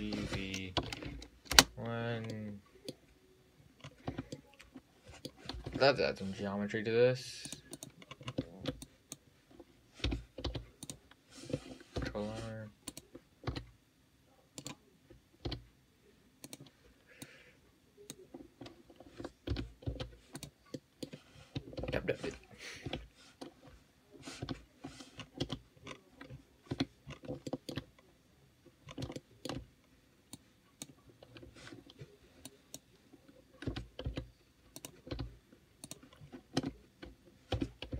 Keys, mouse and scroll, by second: 0.1 g, 1.8 KP_Enter, 2.6-3.8 middle drag, 3.8 scroll down 2, 4.1 middle click, 4.1-4.4 scroll up 3, 4.4 Tab, 4.6-6.1 middle drag, 5.9 `, 7.7 click, 8.4 scroll down 2, 8.5-9.1 scroll up 1, 9.1 click, 10.3 g, 12.2 ctrl+r, 15.7 s, 17.5 click, 19.7 g, 21.0 middle click, 21.5-22.0 scroll down 4, 22.0 ctrl+z, 23.1 Tab, 24.7 `, 25.4 scroll up 3, 26.2-26.5 scroll up 3, 26.5-27.0 scroll down 1, 27.0 Tab, 27.3-27.8 scroll up 6, 27.8 shift+middle click, 28.1-29.1 scroll down 4, 29.1-29.4 scroll up 3, 29.4 shift+middle click, 29.8-30.6 shift+scroll down 4, 30.6-32.8 drag, 33.9 e, 35.4 s, 36.4-36.8 scroll down 5, 36.8 Tab, 37.8 g.